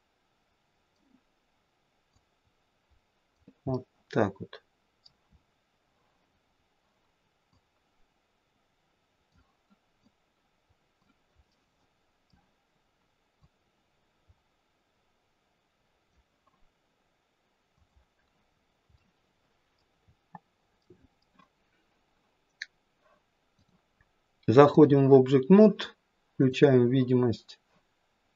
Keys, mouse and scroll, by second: 3.8 middle click, 4.8 middle click, 5.3-6.1 scroll up 5, 6.5-7.6 scroll down 1, 7.6 click, 10.1 click, 11.5 middle click, 13.4 click, 18.5-20.0 scroll down 3, 19.0 middle click, 20.0-20.8 scroll down 1, 20.8 middle click, 20.8-21.5 scroll down 1, 23.6 click, 27.7 click.